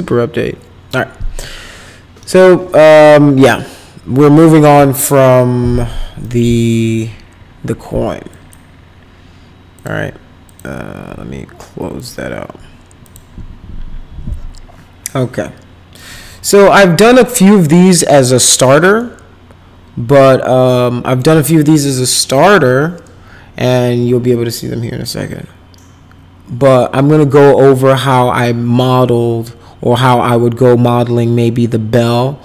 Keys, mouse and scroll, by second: 6.2 right click, 8.3 click, 9.7 click, 10.4 click, 12.0 click, 13.0 click, 19.0-21.2 middle drag.